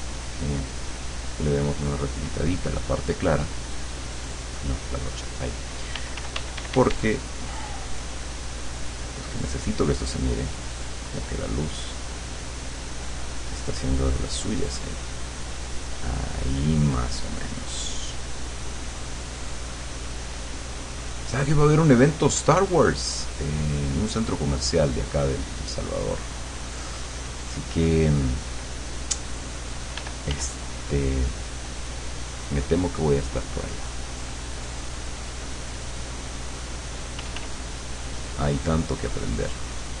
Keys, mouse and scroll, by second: 0.3 click, 3.7 click, 4.2 click, 4.6 click, 5.3 click, 6.0 f, 6.4 d, 7.2-15.6 drag, 16.5-23.7 drag, 25.9 click, 26.6 click, 27.3 click, 28.3 click, 30.1 f, 31.3-34.6 drag, 35.7 click, 36.5 click, 37.3 f, 37.7-40.0 drag.